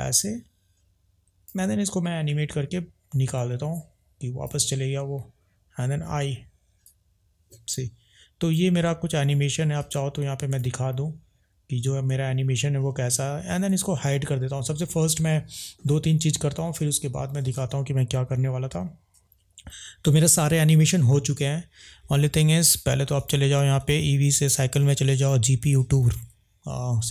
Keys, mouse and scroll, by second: 3.3 drag, 6.9 click, 9.8 click, 10.5 click, 13.7 click, 20.4 ctrl+s, 23.8-24.6 drag, 25.2-26.1 drag.